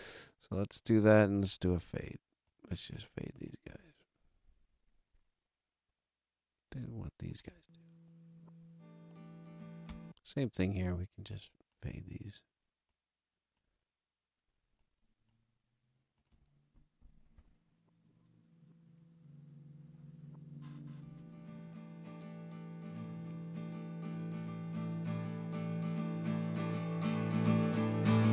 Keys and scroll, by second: 3.6 space, 6.6 space, 9.8 space, 16.2 space.